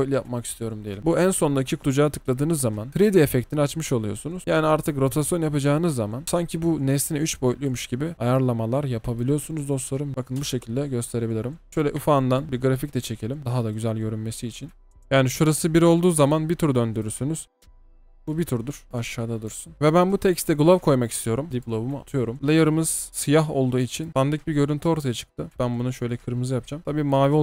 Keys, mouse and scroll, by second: 5.4-8.5 typing, 10.1 space, 10.4 space, 15.0 double click, 17.4 space, 18.9 typing, 21.2-22.0 typing.